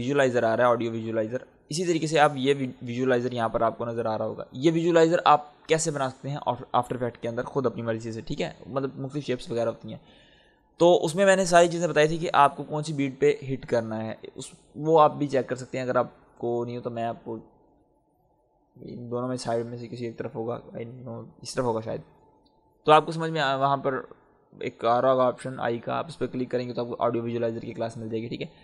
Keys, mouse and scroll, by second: 0.9 click.